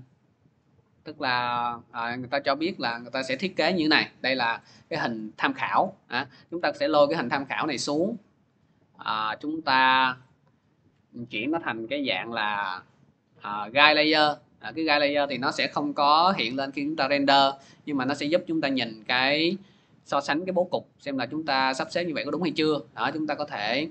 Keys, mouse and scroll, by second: 0.8 click, 1.0 click, 1.8-2.6 scroll, 3.2 scroll, 7.0-7.6 scroll, 9.3 click, 10.8 click, 11.4 Delete, 12.1 click, 12.7 right click, 13.8 click, 15.8 right click, 19.2 click, 19.8 t, 19.8-23.9 drag.